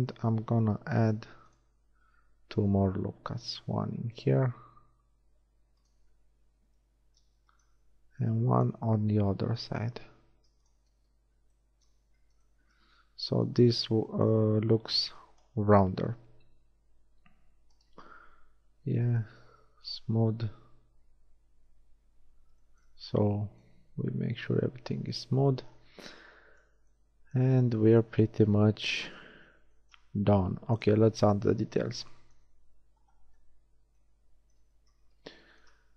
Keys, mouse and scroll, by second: 1.0 ctrl+r, 1.9 click, 6.0 z, 7.4 z, 8.2 ctrl+r, 8.6 click, 11.0 Tab, 12.0 z, 16.4 a, 17.8-18.8 drag, 18.8 t, 21.6 t, 22.3 click, 28.0 shift+KP_1, 29.3 z, 30.1 z, 31.6 Tab, 34.8 z.